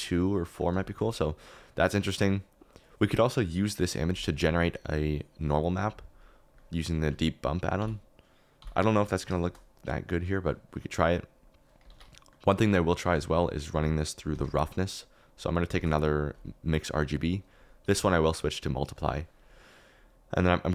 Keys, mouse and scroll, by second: 0.4 middle click, 0.8 shift+middle click, 7.7 n, 8.5 n, 9.4 shift+middle click, 11.9 ctrl+s, 12.1 middle click, 12.3 middle click, 13.2-15.1 middle drag, 13.7 g, 15.1 click, 15.7 shift+d, 16.3 click, 17.2-19.0 drag.